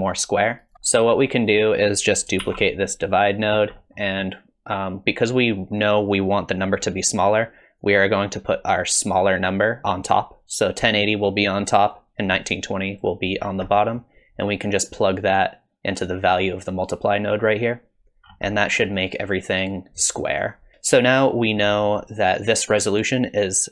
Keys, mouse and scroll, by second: 0.7 middle click, 0.9 middle click, 1.4 click, 2.4 shift+d, 3.5-4.0 scroll up 2, 3.8 middle click, 7.8 click, 11.9 click, 13.4-14.7 scroll down 4, 13.7 middle click, 14.7 click, 18.3-18.9 scroll up 3, 18.6 middle click, 20.2 middle click, 20.9 middle click, 21.7 middle click.